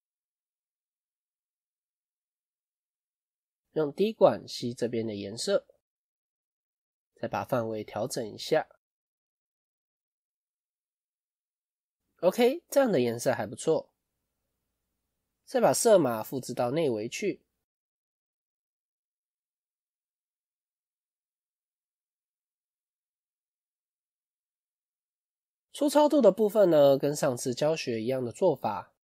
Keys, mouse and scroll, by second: 13.0-14.3 scroll down 1, 18.7 click, 24.0 click.